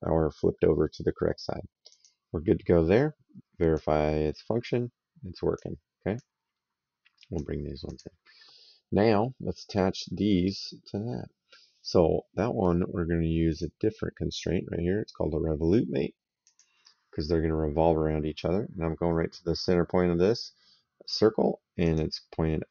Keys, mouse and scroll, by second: 1.7 click, 3.5 click, 6.0 click, 7.7 click, 13.3 click, 16.2 click, 21.7 click.